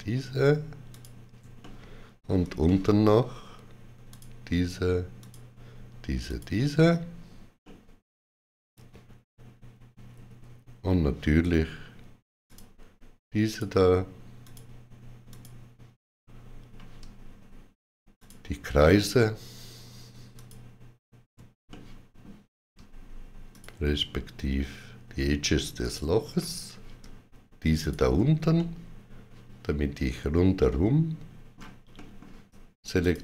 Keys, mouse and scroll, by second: 1.5 middle click, 2.5 shift+middle click, 5.1 shift+click, 7.5 shift+click, 7.5 middle click, 12.3 shift+click, 13.4 shift+click, 18.0 shift+click, 21.5 middle click, 23.4 shift+click, 25.7 shift+click, 27.6 shift+click, 28.4 middle click, 31.8 middle click, 32.8 shift+click.